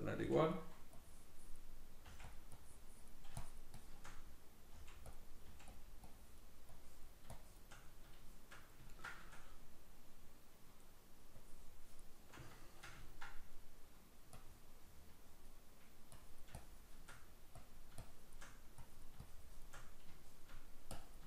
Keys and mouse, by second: 0.2 f, 0.6 click, 2.1 click, 2.1 f, 3.4 shift+click, 4.2 middle click, 4.8 f, 5.2 click, 5.5 f, 5.8 click, 7.4 shift+click, 7.9 middle click, 11.4 click, 12.4 middle click, 13.0-14.4 ctrl+middle drag, 14.4-17.1 drag, 17.1 middle click, 17.6 click, 18.5 middle click, 18.8-19.9 drag, 19.9-20.9 middle drag, 20.9 click.